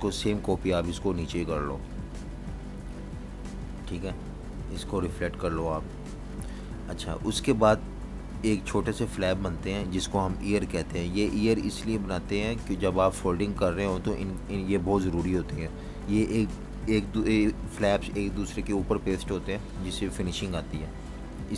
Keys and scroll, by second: 0.0-0.1 typing, 11.4 v, 11.5 space.